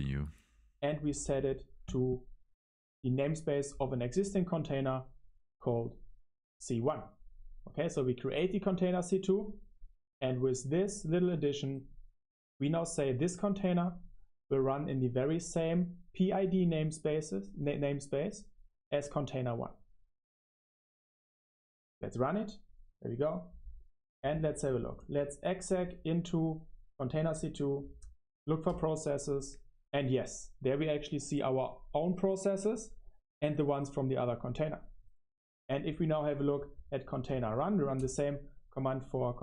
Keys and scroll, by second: 8.4 ctrl+alt+shift+3, 13.2 ctrl+alt+shift+1, 13.6 ctrl+alt+shift+1, 17.2 ctrl+alt+shift+5, 18.7 super+1, 19.0 ctrl+alt+shift+5, 19.0 super+1.